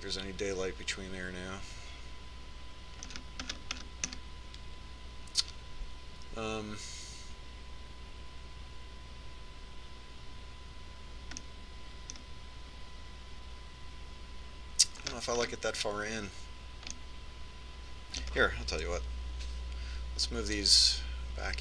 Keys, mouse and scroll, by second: 4.3-7.3 middle drag, 12.7-14.4 middle drag, 16.4-20.1 middle drag, 20.1 KP_3.